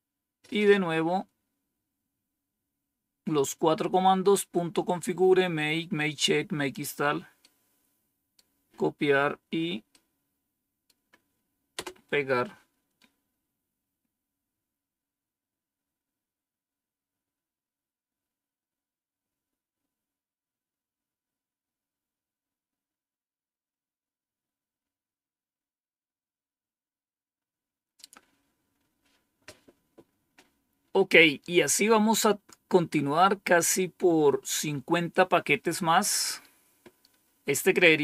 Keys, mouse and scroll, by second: 1.7-2.4 scroll down 1, 4.9-6.6 drag, 7.3 right click, 9.8 right click, 11.6 Return, 37.6-38.0 drag.